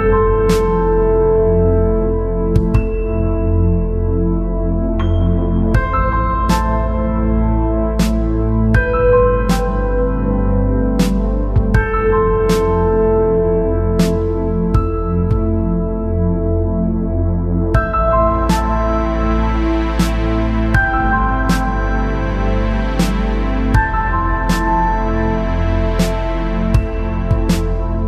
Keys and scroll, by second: 8.8-10.3 space, 20.1-20.7 space, 24.2-24.6 space.